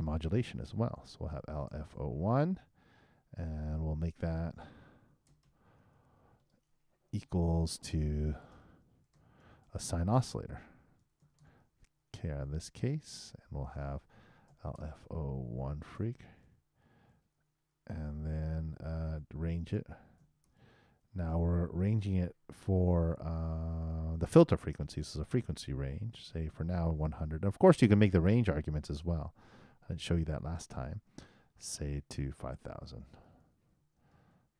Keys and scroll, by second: 8.0-9.9 typing, 11.9 shift+r, 12.2 shift+9, 17.1 shift+q, 17.9 shift+0, 19.1 shift+., 21.4 shift+e, 33.7 shift+0, 34.2 shift+;.